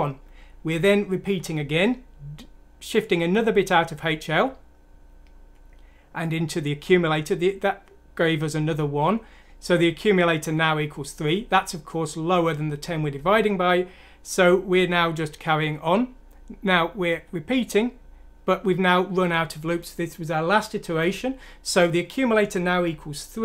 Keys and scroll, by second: 0.7 F7, 1.3 F7, 4.2 F7, 11.2 F7, 17.0 F7.